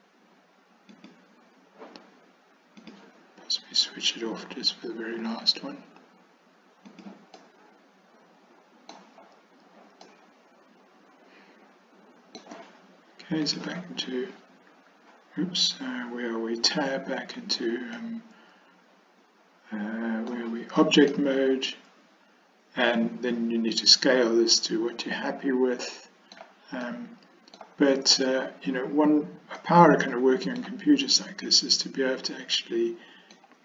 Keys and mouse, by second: 2.9 click, 5.2 s, 7.5-9.0 middle drag, 10.1-12.5 middle drag, 13.5 click, 17.3 Tab, 18.1-20.4 middle drag, 21.2-26.5 middle drag, 26.9-27.7 middle drag, 29.7-30.7 middle drag, 31.5-33.4 middle drag.